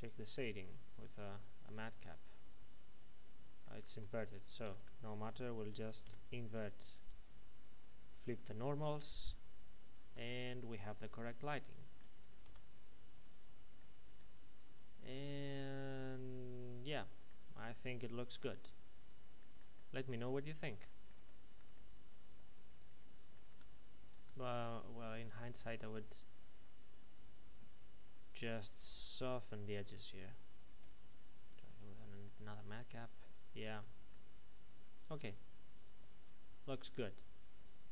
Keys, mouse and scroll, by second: 3.6 middle click, 3.8 Tab, 4.6 a, 6.0 w, 9.1 click, 10.0 Tab, 10.6 middle click, 20.3-20.7 scroll up 1, 21.1 middle click, 21.5 shift+middle click, 23.4 Tab, 25.8-28.2 scroll up 1, 28.2 click, 32.2 middle click.